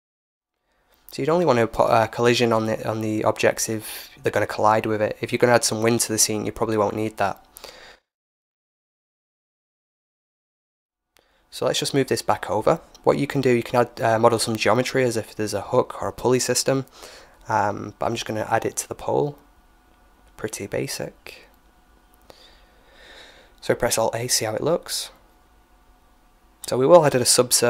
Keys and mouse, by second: 4.3-6.2 drag, 5.7 alt+a, 7.4-9.6 drag, 9.1 middle click, 9.6-11.5 middle drag, 9.6 right click, 10.7-12.5 drag, 14.5 right click, 16.3-19.7 middle drag, 19.7 h, 22.6 alt+a, 25.4 right click, 26.2 y.